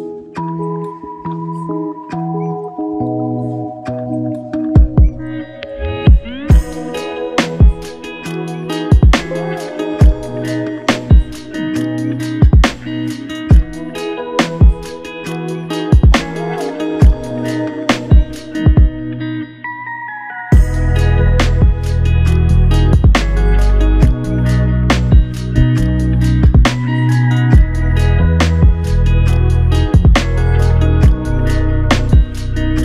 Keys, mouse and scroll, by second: 9.0 double click.